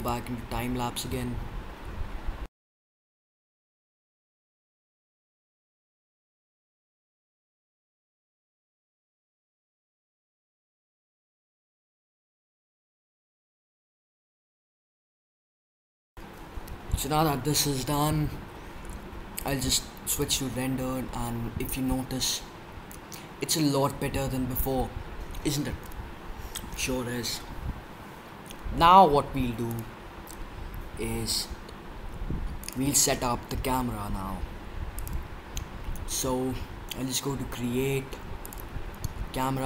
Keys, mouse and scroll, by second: 2.6 right drag, 2.8 drag, 3.1 middle click, 3.5 middle drag, 3.8 middle click, 4.0 middle click, 4.2 middle click, 4.4 middle drag, 5.5 click, 6.1 middle drag, 6.5 middle drag, 6.8 middle click, 7.2 middle click, 7.3 middle click, 10.8 click, 10.8 right click, 12.7 middle drag, 13.4 click, 13.6 drag, 14.1 middle click, 14.4 middle click, 14.5 middle click, 14.9 middle click, 15.2 middle click, 15.5 middle drag, 15.9 click, 19.3-21.1 drag, 29.7-31.4 drag, 31.4-34.9 middle drag, 34.9-39.6 drag, 36.7-38.3 middle drag.